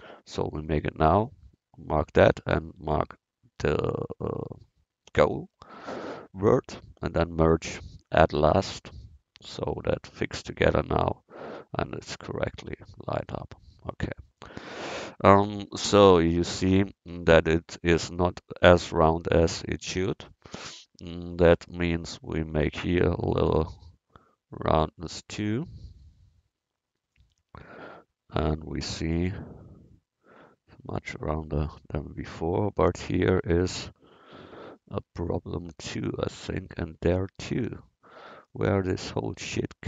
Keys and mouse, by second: 3.0-4.8 drag, 5.2-9.1 drag, 10.5-12.3 drag, 12.8 middle click, 13.9 middle click, 16.0 KP_1, 20.0 a, 20.6 c, 27.6 Tab, 33.1 Tab, 38.5-39.8 middle drag.